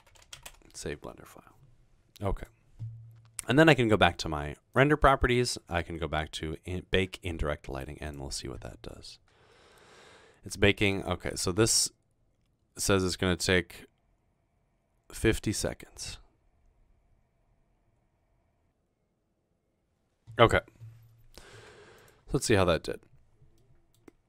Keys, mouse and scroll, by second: 0.0-0.9 typing, 3.1 typing, 4.7 click, 5.8 scroll down 1, 8.1 click, 22.0 click, 22.4-22.8 middle drag, 23.1-24.2 middle drag.